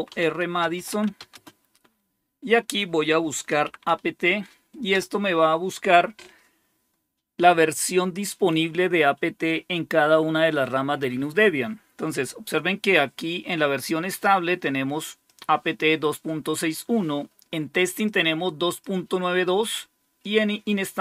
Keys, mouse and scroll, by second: 0.0-1.6 typing, 3.2-4.3 typing, 4.8 Return, 8.5 typing, 15.2-19.5 drag, 20.1-21.0 drag.